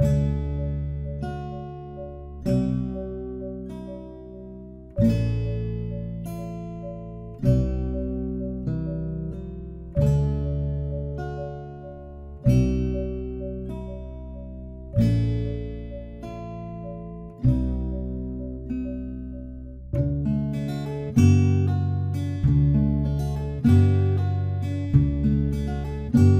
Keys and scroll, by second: 8.0 ctrl+t, 19.6 ctrl+d.